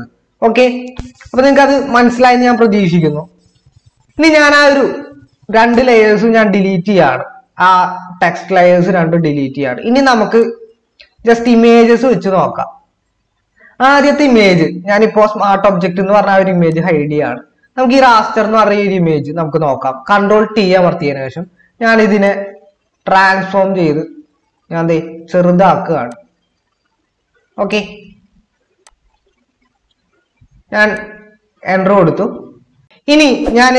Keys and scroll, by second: 20.6 ctrl+t.